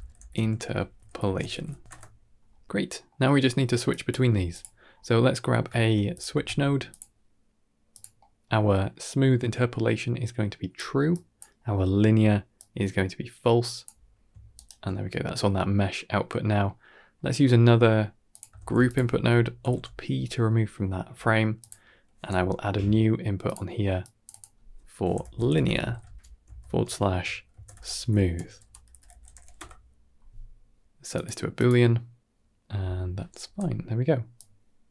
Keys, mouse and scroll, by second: 0.8 shift+BackSpace, 2.5 click, 2.8 middle click, 3.4 middle click, 3.8 drag, 4.2 g, 4.7 scroll up 2, 5.0 middle click, 5.3 scroll up 2, 5.6 shift+a, 8.0 middle click, 9.4-10.6 drag, 11.0 click, 12.4-13.7 drag, 14.4 ctrl+right click, 15.2 drag, 16.5 middle click, 17.0 scroll down 2, 17.2 middle click, 17.6 middle click, 18.2 click, 18.4 shift+d, 19.5 alt+p, 20.3 middle drag, 20.8-21.1 scroll up 3, 21.1 middle click, 21.7 g, 22.2 n, 23.3 click, 24.1-29.4 drag, 27.8 o, 28.3 BackSpace, 28.5 BackSpace, 29.0 o, 31.0-31.5 drag, 33.3 n, 34.2-34.9 drag.